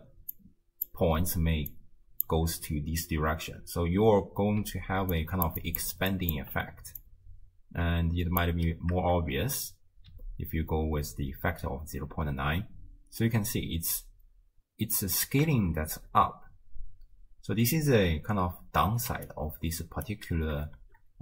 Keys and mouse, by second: 0.0-3.0 typing, 1.7 click, 4.6 d, 5.1 click, 5.1-6.1 d, 6.1 click, 6.4 d, 7.0-8.4 drag, 7.0 d, 9.4 shift+space, 12.1 space, 15.6 shift+space, 19.1-20.8 typing, 19.3 click.